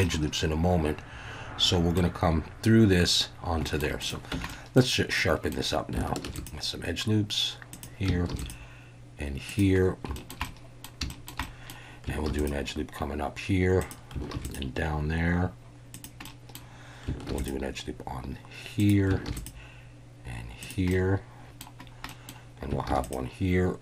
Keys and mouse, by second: 0.0-2.0 middle drag, 3.6 shift+middle click, 4.0 click, 4.3 Tab, 4.5 click, 5.2-5.5 drag, 6.2 ctrl+r, 7.7 click, 8.3 ctrl+r, 9.5 click, 10.1 shift+middle click, 10.4-10.8 middle drag, 11.1 shift+middle click, 11.4 middle drag, 12.3 ctrl+r, 13.8 click, 14.3 ctrl+r, 15.9 click, 16.2-16.5 middle drag, 17.3 ctrl+r, 18.8 click, 19.3 ctrl+r, 20.6 click, 20.9 middle click, 22.1 middle click, 22.9 ctrl+r.